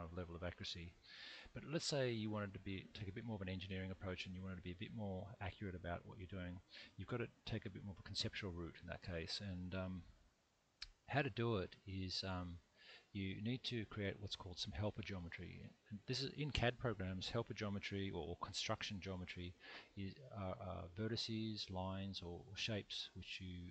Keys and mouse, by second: 12.9-14.8 middle drag.